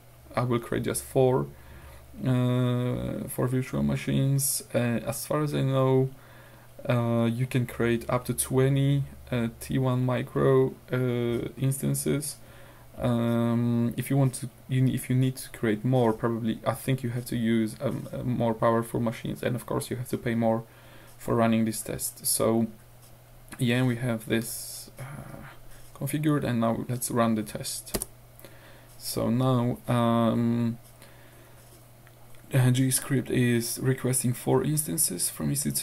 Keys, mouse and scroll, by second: 28.0 Return.